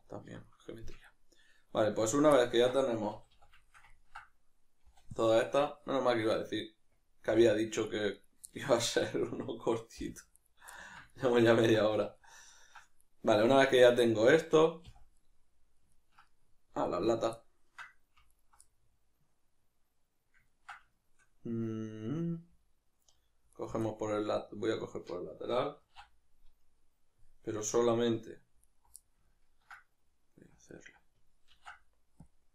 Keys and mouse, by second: 3.1 a, 4.9 b, 8.1 right click, 8.5-9.0 ctrl+middle drag, 9.0 right click, 10.7-16.8 ctrl+middle drag, 11.9 a, 14.2 Tab, 16.8 alt+right click, 17.4-18.3 ctrl+middle drag, 18.3 alt+right click, 18.6-23.5 middle drag, 23.5 alt+right click, 23.9-28.7 middle drag, 25.8 ctrl+e, 28.7 alt+right click, 29.0-30.7 ctrl+middle drag, 30.7 alt+right click, 31.5 ctrl+e.